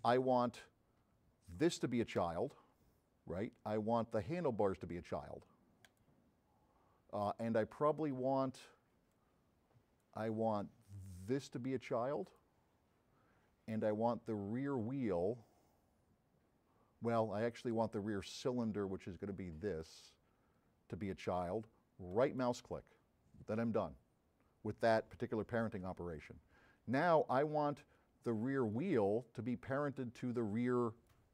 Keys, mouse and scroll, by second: 2.2 click, 5.9 click, 9.2-10.1 drag, 12.3 click, 19.7 click, 22.2 right click, 28.8 click, 30.6 click.